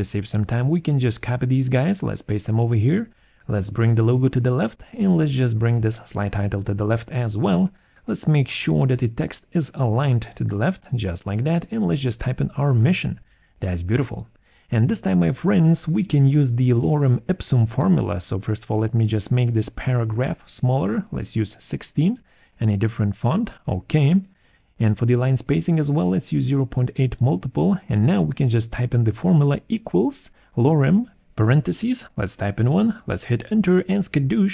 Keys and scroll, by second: 1.1 ctrl+c, 1.8 ctrl+v, 10.9 ctrl+a, 11.4-13.4 typing, 12.0 Return, 18.9 ctrl+a, 20.2 1, 20.5 6, 20.6 Return, 23.8 alt+5, 25.7 BackSpace, 28.9 ctrl+a, 29.9-32.3 typing, 31.9 Left, 32.7 Right, 33.3 Return.